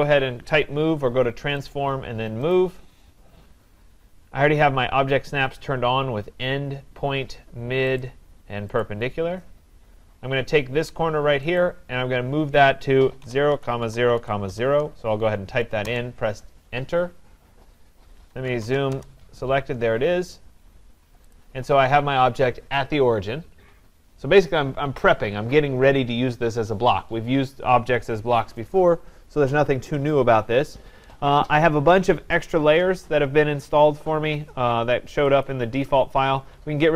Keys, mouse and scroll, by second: 1.7 click, 2.5 click, 3.5 scroll down 5, 3.7 scroll, 3.9-4.6 scroll up 6, 8.0 click, 8.9 click, 11.6 click, 13.0-15.0 typing, 15.9 Return, 18.5 z, 18.6 Return, 18.8 s, 18.9 Return, 20.1 scroll, 20.3 scroll down 4, 20.8 scroll up 2, 21.3 click, 35.4-36.9 drag.